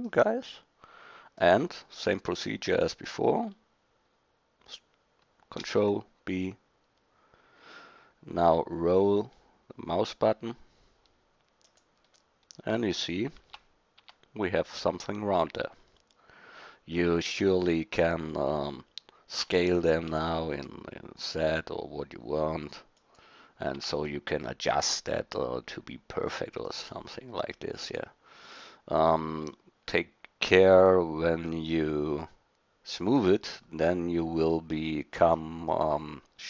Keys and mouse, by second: 5.6 ctrl+b, 12.3-13.4 drag, 13.4 Tab, 14.0 Tab, 14.8 click, 19.4 s, 23.8 Tab, 24.1-24.5 middle drag, 26.2 middle click, 27.8-30.7 middle drag, 31.8-32.6 middle drag, 31.9 click, 35.6-36.4 middle drag.